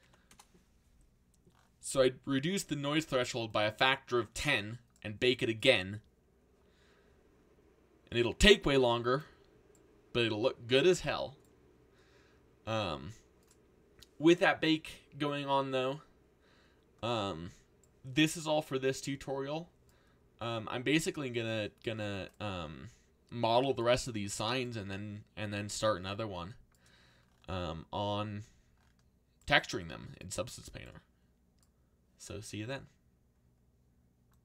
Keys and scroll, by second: 0.0 1, 0.3 Return.